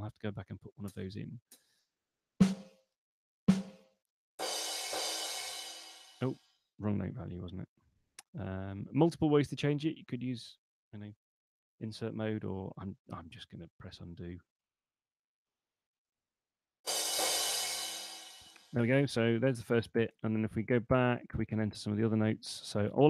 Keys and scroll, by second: 13.5 super+z, 20.2 super+Left.